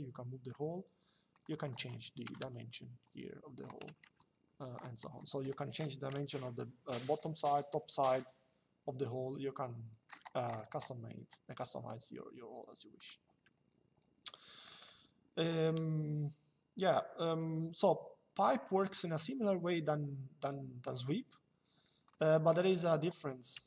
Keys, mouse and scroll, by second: 1.0 click, 2.0 KP_2, 3.8 KP_Enter, 12.7 click, 14.4 click, 21.8 click, 23.3 Delete.